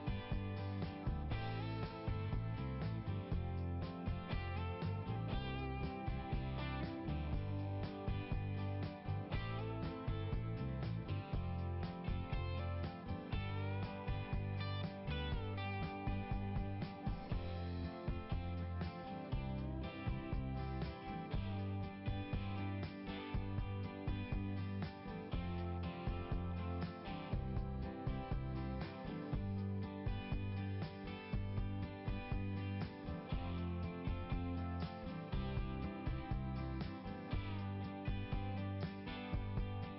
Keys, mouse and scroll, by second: 2.7 click, 2.8 click, 2.9 click, 4.3 click, 4.4 click, 5.5 click, 7.5 scroll up 1, 9.4 scroll up 1, 21.9-23.2 scroll up 4, 24.3 scroll up 2, 28.0 scroll up 1, 30.1 scroll up 1, 34.2 click, 34.3 click, 35.9 right click, 38.5 click, 38.9 click.